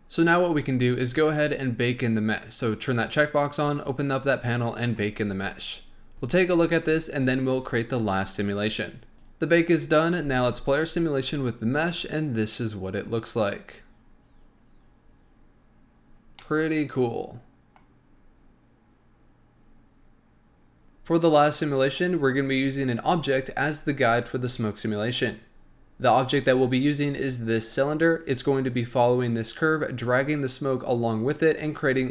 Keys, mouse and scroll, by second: 3.5 click, 4.6-9.1 drag, 10.1 space, 16.7-19.9 middle drag.